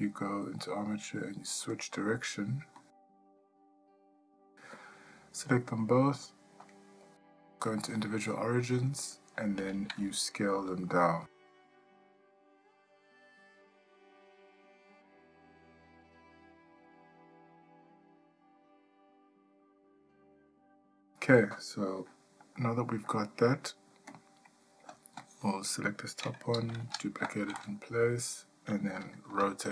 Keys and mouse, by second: 4.1 click, 6.7-7.9 drag, 8.8 click, 22.6 shift+middle click, 25.0 click, 25.3 click, 26.8 shift+d, 29.3 r.